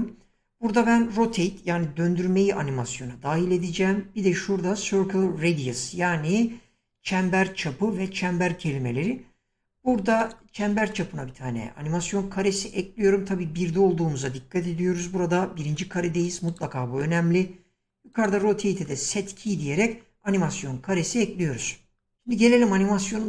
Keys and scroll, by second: 14.8 <.